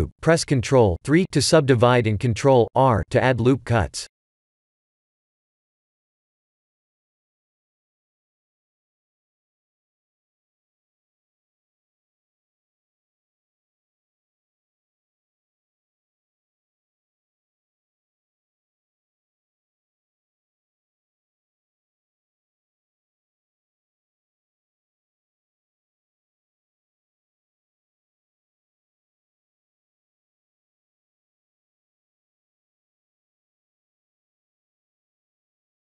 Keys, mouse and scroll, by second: 2.7 s, 5.2 ctrl+3, 5.8 s, 9.2 s, 10.1 s, 11.1 Tab, 11.7 ctrl+r, 18.3 shift+middle click, 19.2 ctrl+r, 22.7 Tab, 23.8 s, 25.6 g, 28.9 s, 30.9 middle click, 33.6 click, 34.2 s.